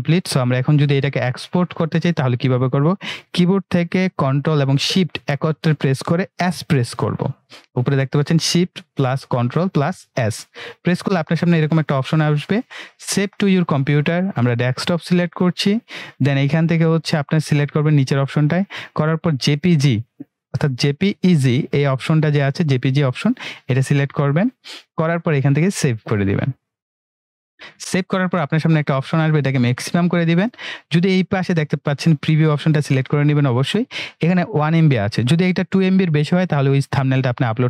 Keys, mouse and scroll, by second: 4.4 ctrl+Num_Lock, 9.7 ctrl+shift+s, 13.2 click, 16.0 click, 23.8 click, 26.7-37.6 drag.